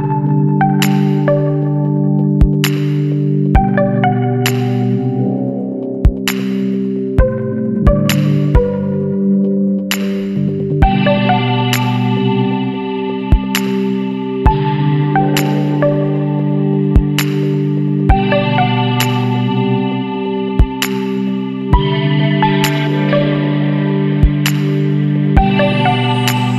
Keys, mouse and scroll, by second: 0.6 click, 1.8 l, 4.3 click, 6.2 click, 10.1 click, 12.0 click, 14.1 click, 16.8 click, 18.9 click, 20.0 click, 21.3 e, 23.4 click, 24.8 click, 25.3 e, 26.4 click.